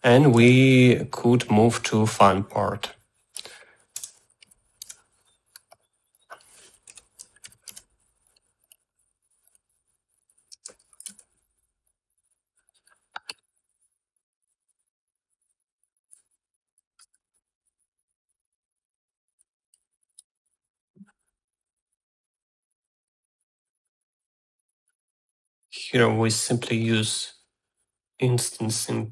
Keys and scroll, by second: 1.5 Tab, 4.6-6.0 typing, 7.5 Delete, 7.7 Tab, 7.8-8.8 typing, 11.2 Tab, 11.2-12.2 typing, 17.2-18.3 typing, 20.9 g, 21.6 e.